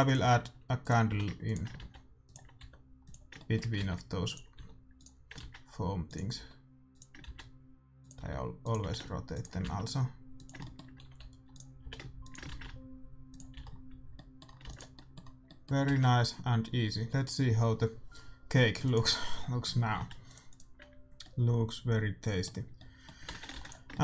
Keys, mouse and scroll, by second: 0.0-2.7 typing, 3.3-5.1 middle drag, 3.7-9.6 typing, 10.7-12.3 middle drag, 11.0 r, 11.7 g, 12.4 shift+d, 13.5 a, 13.7-15.5 middle drag, 14.6 ctrl+s, 17.1 shift+z, 19.1-21.5 drag, 20.3 ctrl+s, 21.5 middle click, 21.9 click, 22.5-24.0 middle drag, 23.5 shift+z.